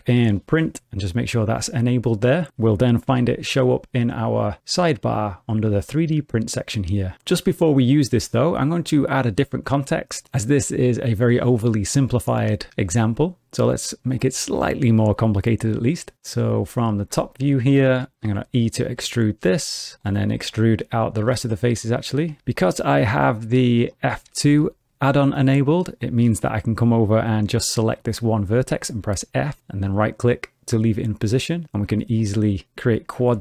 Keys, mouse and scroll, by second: 3.1 n, 5.7 click, 13.9-14.4 scroll down 3, 14.4 middle click, 15.8 2, 17.2 scroll down 2, 17.4 shift+middle click, 18.2 e, 19.9 click, 20.6 click, 20.7 e, 21.4 click, 21.5 e, 22.4 F4, 27.4 1, 27.9 click, 28.7 f, 31.6 click, 31.8 f, 32.9 click, 33.2 f.